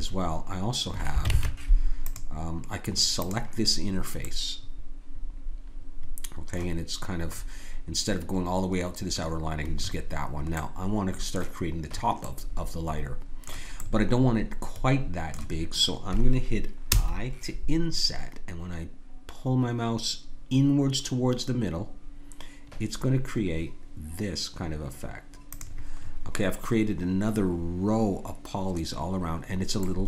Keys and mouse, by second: 1.3 ctrl+Tab, 3.2 click, 5.7 middle click, 7.4-9.4 middle drag, 10.0-14.9 middle drag, 16.9 i, 26.0-30.0 middle drag.